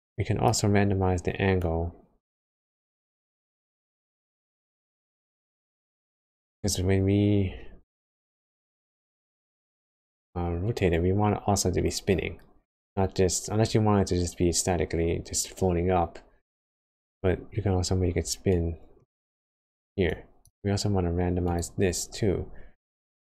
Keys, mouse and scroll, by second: 3.9-4.6 scroll down 5, 4.9 middle click, 6.4 middle click, 18.1 space, 18.6 click, 20.7 scroll down 1, 20.9 space, 22.0 shift+a.